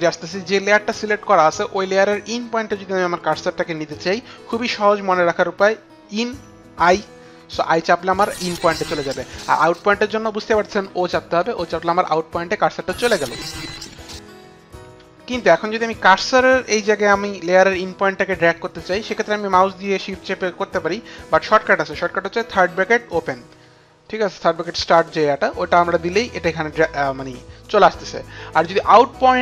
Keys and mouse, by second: 6.9 i, 10.4 o, 15.8 click, 16.8 click.